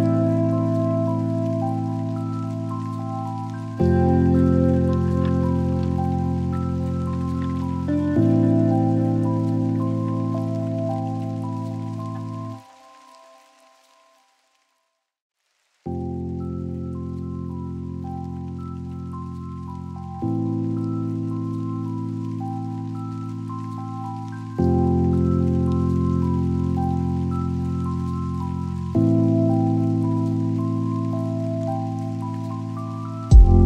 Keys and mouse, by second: 0.5-3.6 drag, 4.8-6.4 drag, 11.3 drag, 13.0 click, 15.9-21.1 drag, 23.2 click, 25.4 click, 26.5-29.5 drag, 30.9 right click, 33.3 click.